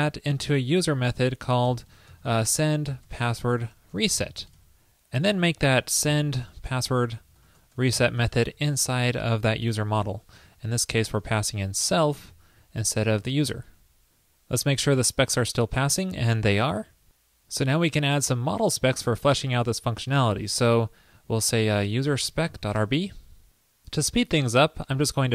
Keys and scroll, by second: 1.2 super+x, 8.5 super+v, 9.9 super+s, 11.0 alt+Left, 12.4 alt+shift+Left, 13.7 super+s.